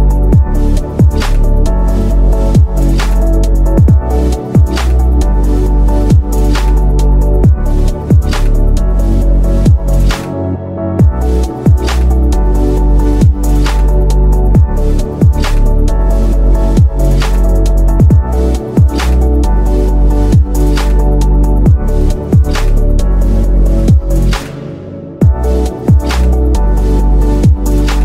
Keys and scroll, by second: 3.3 space, 12.1 ctrl+g, 14.5 ctrl+g, 19.3 Escape, 20.1 F2, 22.1 F10, 24.6 space, 25.9 F3.